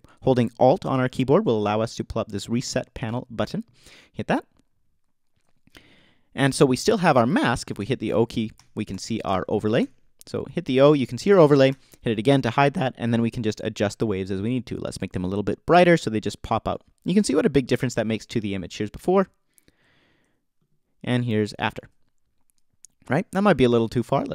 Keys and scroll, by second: 7.8 o, 11.7 o, 21.7 alt+super+z.